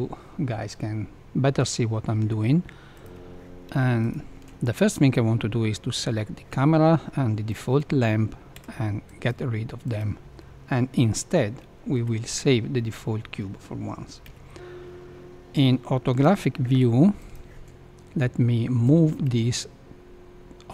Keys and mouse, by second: 3.0 click, 8.5 x, 9.9 click, 11.9 KP_Decimal, 14.2 KP_1, 15.5-16.0 shift+middle drag, 17.1 click, 18.8-20.7 drag.